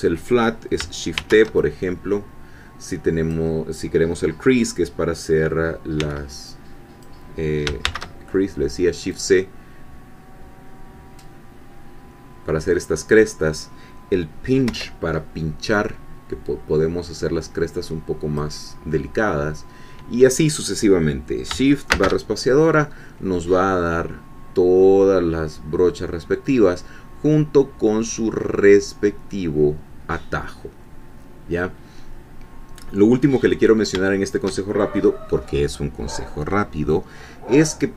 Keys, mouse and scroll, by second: 1.2 shift+t, 1.6-3.5 shift+drag, 6.0 c, 6.5-7.2 drag, 7.8 shift+c, 9.1-13.0 drag, 14.7 p, 15.7-18.5 drag, 18.8-19.1 scroll up 1, 21.9 shift+space, 32.7 scroll down 1, 33.2-33.6 scroll up 1, 33.6 scroll down 1, 34.1-35.4 shift+middle drag.